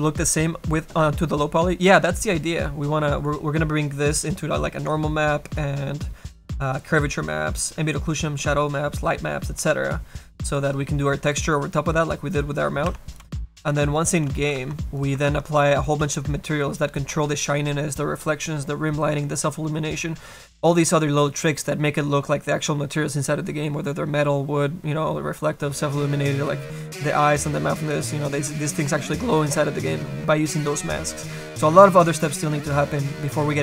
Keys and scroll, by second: 9.0 Escape, 14.6 ctrl+z.